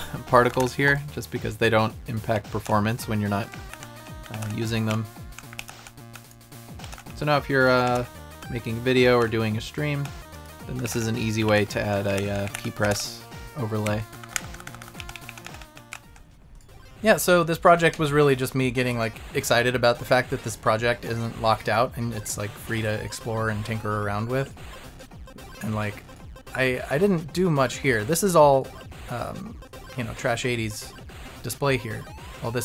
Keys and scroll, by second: 0.5 Down, 0.6 Right, 2.3 Down, 2.6 Right, 3.7 Up, 4.3 Left, 4.4 Right, 4.9 Up, 5.7 Right, 6.8 Left, 6.9 Down, 8.9 Left, 9.2 Down, 10.9 Left, 10.9 Down, 10.9 Right, 11.6 Right.